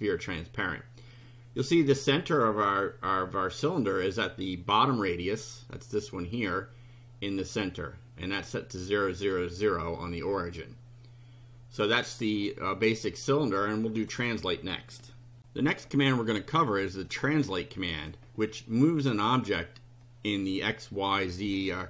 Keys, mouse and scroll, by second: 1.2-2.5 drag, 5.7 click, 10.6-12.3 drag, 14.0 click, 17.1-18.2 drag.